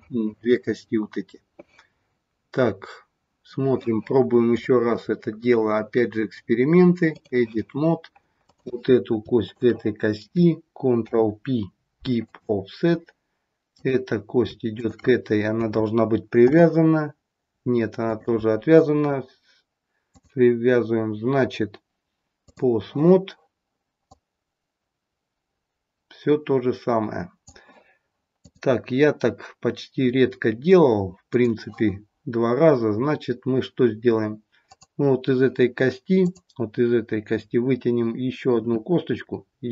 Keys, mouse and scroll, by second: 4.5 click, 8.2 click, 9.3 shift+click, 10.9 ctrl+p, 13.6 click, 14.7 shift+click, 16.4 ctrl+p, 19.9 click, 24.0 click, 28.3 click, 34.6 click, 38.6 e.